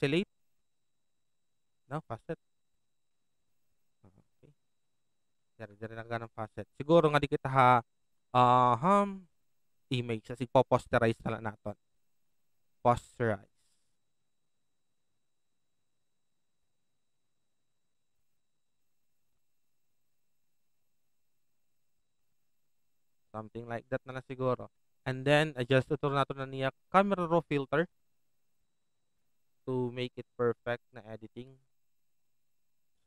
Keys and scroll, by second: 3.4 ctrl+g, 5.4 ctrl+alt+z, 23.6 ctrl+alt+z.